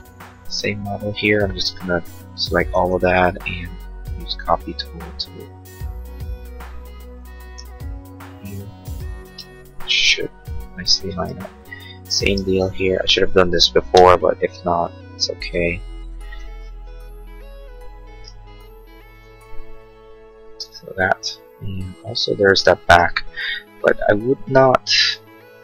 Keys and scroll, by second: 12.2 space, 14.1 m, 20.5 space.